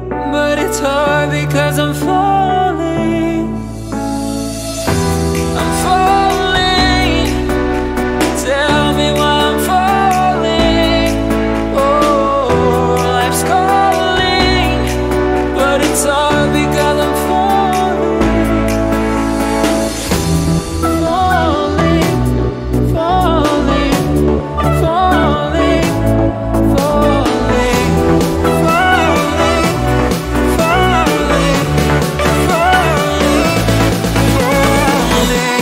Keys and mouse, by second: 0.0 g, 0.8-3.0 middle drag, 5.1 g, 10.7-13.2 drag, 13.2 g, 25.6-30.7 drag, 30.7 shift+d, 34.4-35.6 drag.